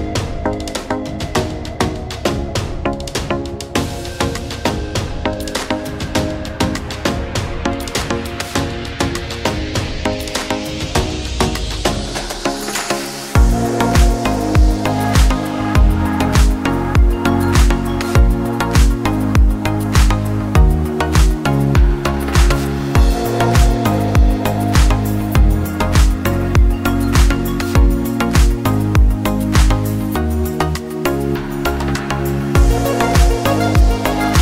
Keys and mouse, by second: 13.3 click, 14.5 ctrl+shift+click, 23.2 click, 23.2 right click, 27.8 click.